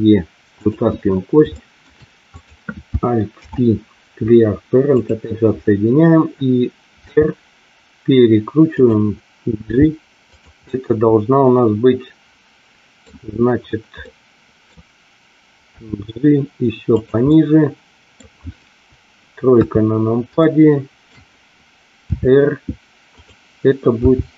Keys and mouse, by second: 0.6 click, 1.4 shift+middle click, 3.3 alt+p, 7.0 r, 8.7 click, 9.7 g, 10.2 click, 10.6-13.1 middle drag, 14.0 middle click, 15.7 g, 17.0 click, 17.3 middle click, 19.5 KP_3, 20.5 shift+middle click, 22.1 r, 24.0 g.